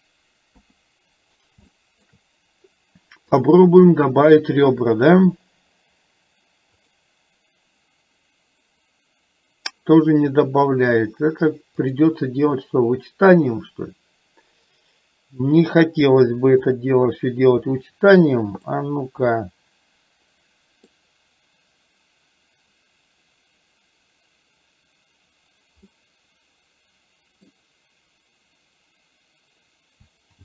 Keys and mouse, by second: 1.8 shift+middle click, 3.4 click, 11.9 click, 16.8 click, 18.8-20.9 middle drag, 26.0-27.5 middle drag.